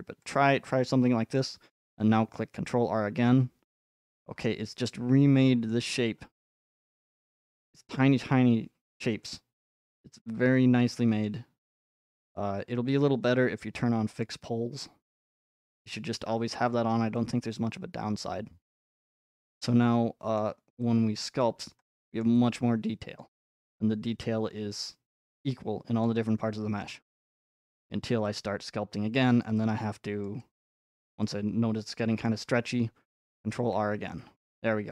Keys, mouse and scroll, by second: 0.3-2.4 drag, 1.4-3.5 middle drag, 4.0-4.6 scroll up 5, 5.7-6.5 scroll up 1, 6.6 scroll up 1, 6.8 scroll, 6.8 scroll up 2, 7.4 scroll, 9.1-10.3 middle drag, 10.3 scroll, 11.2-12.6 middle drag, 12.6-13.1 scroll down 6, 13.1-13.9 scroll, 14.2 click, 16.8 scroll, 18.7-19.1 scroll, 20.3-21.4 middle drag, 20.3 scroll, 21.4 click, 21.4-21.8 scroll, 21.6-23.2 middle drag, 23.2 click, 23.6-25.3 middle drag, 26.0 click, 26.2 middle click, 26.2 middle click, 27.6 middle click, 27.9 middle click, 29.4 click, 30.0 click, 30.3 middle click, 31.1-32.3 drag, 32.3 middle click, 33.3 scroll, 33.7 ctrl+r, 34.4 middle click.